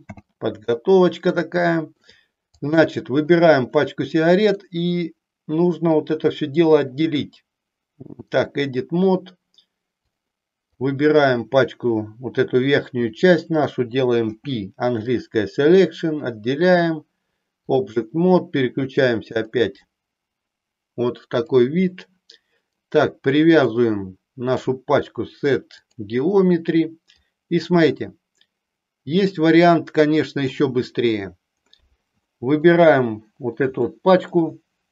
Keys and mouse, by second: 1.3 shift+middle click, 2.5 click, 4.5-8.5 drag, 10.7 click, 14.3 p, 16.8 click, 21.2 click, 23.6-25.8 drag, 27.2-30.4 drag, 32.2 shift+middle click, 33.7 shift+middle click.